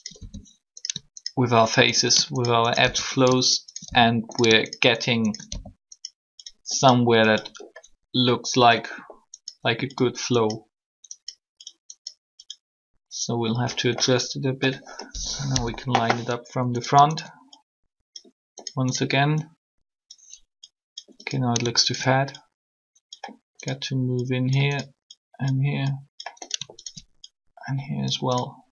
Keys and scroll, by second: 15.2 1.